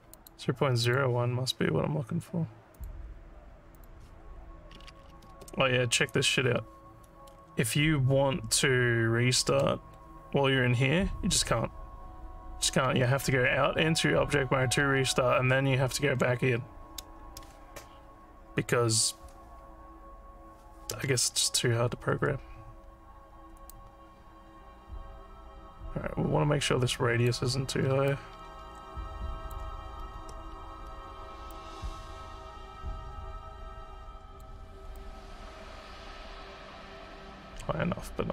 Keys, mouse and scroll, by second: 0.1 click, 0.8 click, 2.8 click, 3.7 click, 7.3 Tab, 13.2 Tab, 15.1 Tab, 23.7-27.3 drag, 28.0-29.5 alt+drag, 30.0 ctrl+z, 31.5-34.4 drag, 35.0-38.3 alt+drag.